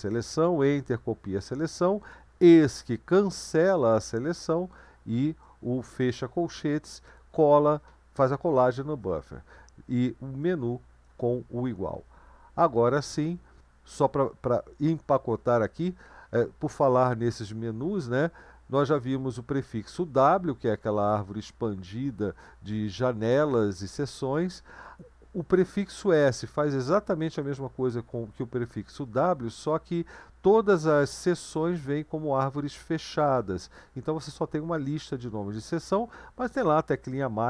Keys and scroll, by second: 12.9 Right.